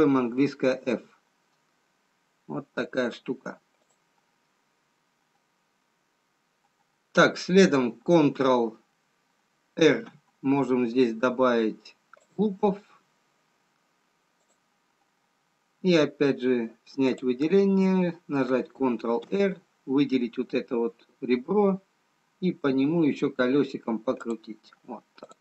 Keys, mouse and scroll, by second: 0.9 f, 3.1 scroll up 2, 4.3 click, 4.3 scroll down 2, 9.8 ctrl+r, 17.3 click, 19.3 ctrl+r.